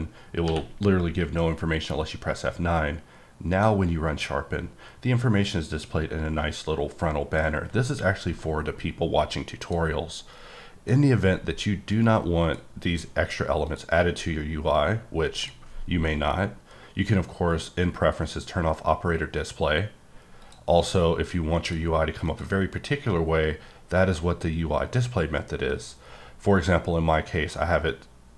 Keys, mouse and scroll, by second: 0.4 q, 3.5 click, 9.6 click, 10.3 click, 11.9 click, 13.6 click, 14.1-15.4 scroll down 4, 15.4 click, 15.7-16.3 scroll down 1, 16.3-18.6 scroll down 4, 20.4 click, 20.8-21.3 scroll up 3, 21.6 click, 22.2 click.